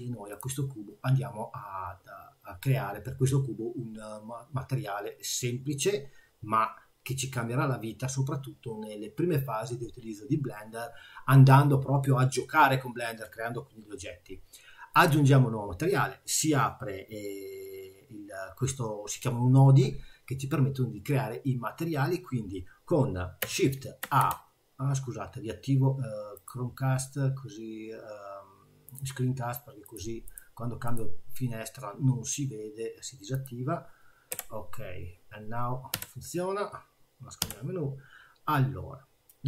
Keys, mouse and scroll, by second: 33.3 click, 34.3 n, 35.9 n, 37.4 n.